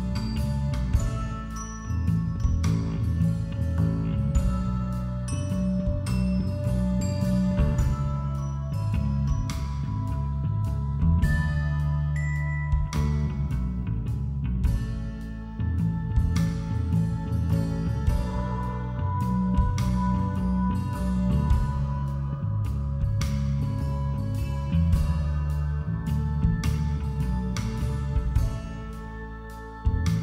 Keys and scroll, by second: 2.2 b, 3.3 ctrl+=, 5.0 space, 7.0-11.2 typing, 12.0 ctrl+z, 12.3 ], 12.9 ctrl+z, 16.6 [, 17.1 ctrl+-, 17.9 ctrl+=, 20.1 ctrl+=, 20.4 ], 22.3 b, 24.0 [, 24.2 ], 25.5 ctrl+-.